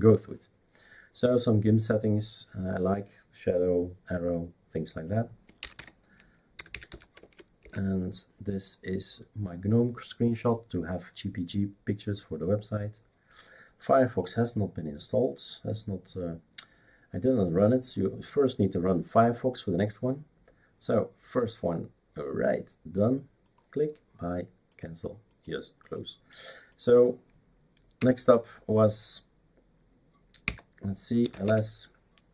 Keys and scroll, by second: 5.6-7.4 typing, 7.6 Return, 28.0 Up, 30.4 Down, 31.0-31.8 typing.